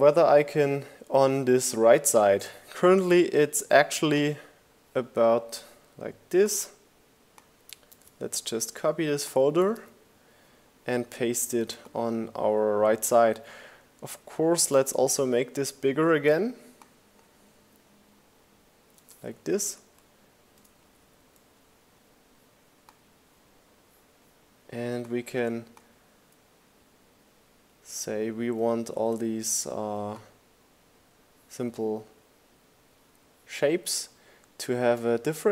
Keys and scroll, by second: 6.7 super+c, 8.3 super+v, 17.3 shift+Up, 17.7 shift+Left, 18.7 Down.